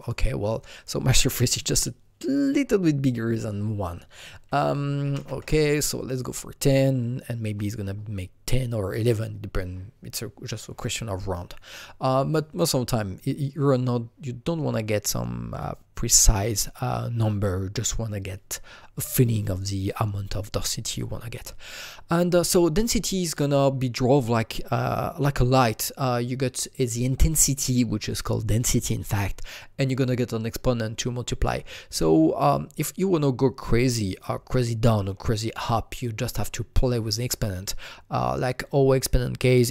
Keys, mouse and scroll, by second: 0.0 click, 4.5 click, 4.6 double click, 4.9 KP_1, 5.1 KP_0, 5.4 KP_Enter, 6.0 click.